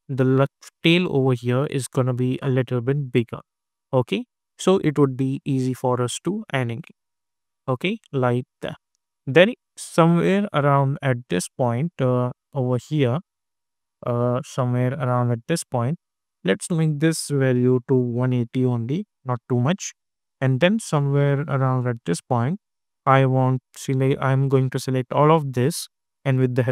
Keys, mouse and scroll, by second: 8.7 space, 10.0-16.6 drag, 18.6 Return, 20.8-23.7 drag, 25.4 shift+click.